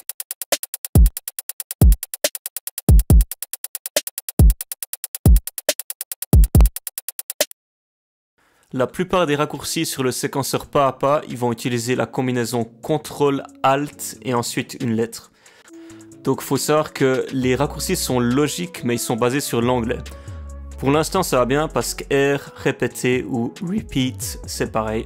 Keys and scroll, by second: 7.4 space, 8.3 ctrl+alt+r.